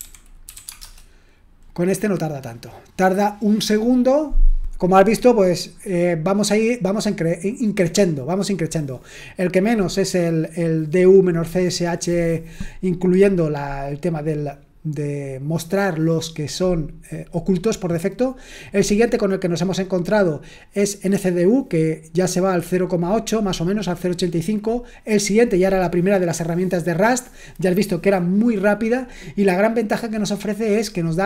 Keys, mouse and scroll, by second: 0.0-1.0 typing.